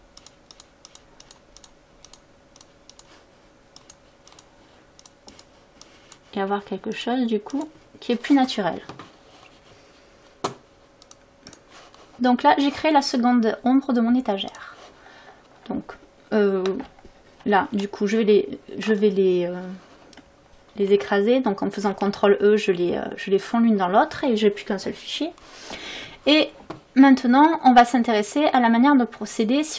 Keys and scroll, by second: 21.9 ctrl+e.